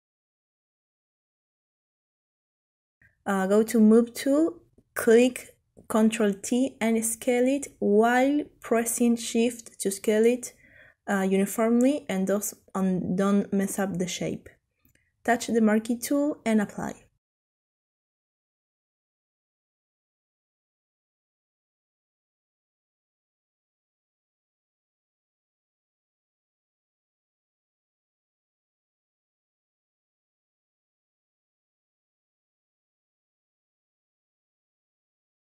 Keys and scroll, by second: 5.0 ctrl+t, 24.9 ctrl+t, 25.8 ctrl+shift+t.